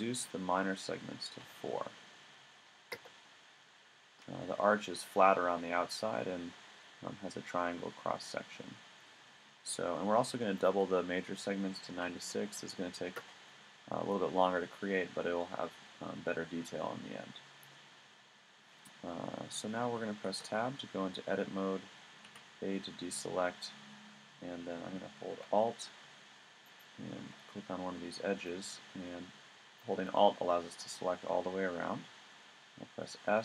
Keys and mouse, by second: 2.1-8.0 middle drag, 10.1 middle click, 12.8-14.6 middle drag, 20.3 Tab, 22.3 a, 26.6-29.4 middle drag, 32.5 x.